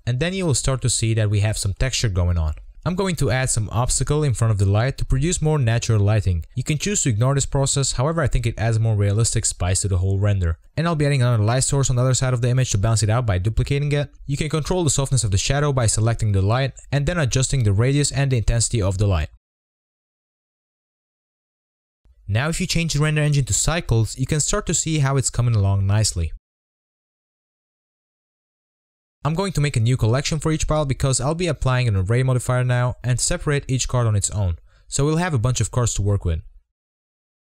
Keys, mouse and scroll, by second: 0.4 click, 0.8-1.3 scroll up 5, 1.3 click, 1.6-2.2 scroll down 4, 2.2 click, 2.4 scroll down 1, 2.5-3.1 shift+middle drag, 3.1 scroll up 1, 3.2-4.1 shift+middle drag, 4.2 scroll up 1, 4.2-7.9 typing, 5.4 scroll down 2, 5.5 middle click, 5.9 middle click, 6.4 middle click, 8.0 middle drag, 8.3 click, 8.4 click, 8.4 Tab, 8.6 scroll up 1, 8.7 ctrl+r, 9.2 ctrl+r, 9.8 scroll up 1, 9.9 middle click, 10.0 3, 10.1 click, 10.3 shift+click, 11.1 click, 11.5 click, 11.6 ctrl+click, 12.2 shift+click, 13.0 ctrl+click, 13.3-16.8 typing, 13.4 shift+middle click, 14.0 scroll down 1, 14.3 Tab, 14.8 scroll down 10, 14.8 click, 14.9 middle click, 15.0 scroll up 3, 15.2 middle click, 16.4-16.8 scroll up 6, 17.0-17.5 scroll down 14, 17.2 middle click, 17.5 click, 18.1-20.6 typing, 18.8 scroll up 10, 18.9 shift+middle click, 19.0 scroll down 2, 19.1 shift+middle click, 19.5 middle click, 20.0 middle click, 20.1-20.5 scroll up 4, 20.2 shift+middle click, 20.5 scroll down 1, 21.1 click, 21.4-24.5 scroll up 4, 24.5-30.6 drag, 30.6-31.0 scroll down 3, 31.0 scroll up 4, 31.0-32.7 typing, 31.1 middle click, 31.5 shift+click, 32.1 middle drag, 32.4 right click, 32.5 click, 33.1 right click, 33.5 click, 34.6 ctrl+z, 35.1 ctrl+z, 35.2 click, 35.2 right drag, 35.4 ctrl+z, 35.4 right click, 35.6 ctrl+z, 35.7-36.0 right drag, 36.0 click.